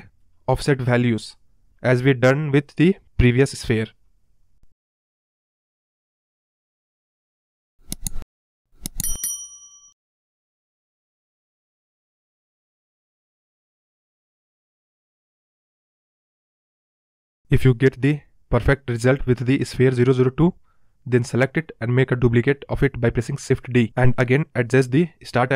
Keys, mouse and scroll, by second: 0.4 scroll down 3, 0.5-2.3 middle drag, 2.3 shift+click, 4.2 right click, 4.6 space, 4.7-5.2 scroll down 11, 5.2 space, 5.9 space, 6.2 click, 6.3-6.9 scroll up 5, 6.9 click, 7.2 Left, 8.2 shift+click, 9.7 right click, 10.0 click, 10.0 space, 10.1 scroll down 1, 10.3 space, 10.8 click, 12.0 shift+click, 13.3-13.6 right drag, 13.6 click, 14.9 space, 15.0 space, 17.5 space, 18.0-18.7 scroll down 5, 18.7 space, 20.4 click, 20.6 scroll up 4, 20.9-22.5 drag, 22.5 shift+d, 25.3-25.5 drag.